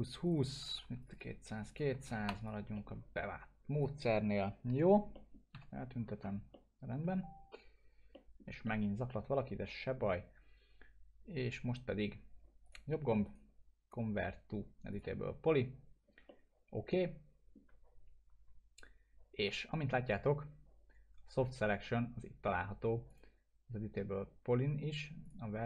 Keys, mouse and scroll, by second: 0.2 click, 0.4-2.6 typing, 1.0 click, 2.4 click, 2.7 middle click, 3.7 click, 5.1 middle click, 5.5 g, 6.0 scroll up 1, 6.5-7.1 alt+middle drag, 8.6-10.2 alt+middle drag, 12.6 right click, 14.9 click, 16.3-17.8 alt+middle drag, 23.1 click.